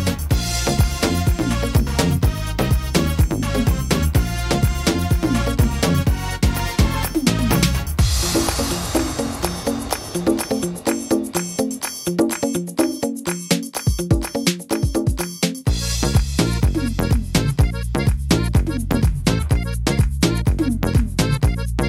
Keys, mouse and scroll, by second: 0.0 right click, 1.1 l, 2.8 scroll up 4, 3.7 middle click, 3.7 scroll up 5, 4.4 right click, 6.2 middle click, 6.5-6.9 scroll down 5, 8.5 l, 15.4 middle click, 15.7-16.3 scroll down 5, 16.3 middle click, 16.8 scroll up 3, 17.3 middle click, 17.6-18.1 scroll down 2, 18.1 shift+middle click, 18.7-19.1 scroll up 3, 19.1 shift+middle click, 19.7 shift+middle click, 20.3-20.7 scroll up 2, 20.6 middle click, 21.7 click.